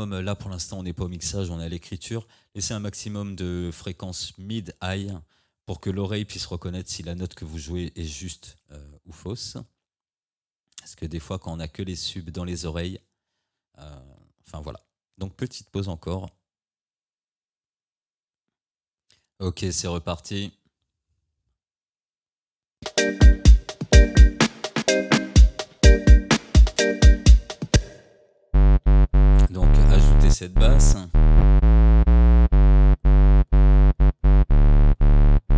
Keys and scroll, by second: 27.8 space.